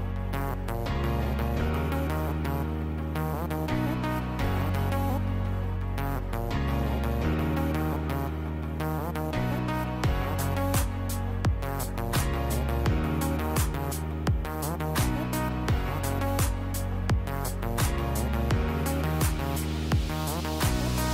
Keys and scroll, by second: 14.7-15.4 typing.